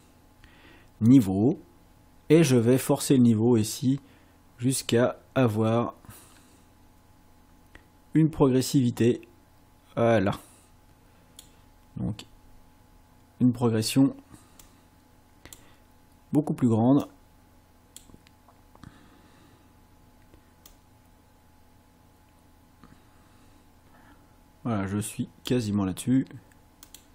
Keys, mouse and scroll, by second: 1.1 click, 3.0-11.6 drag, 14.6 click, 17.1 click, 20.7-25.7 drag, 26.9 click.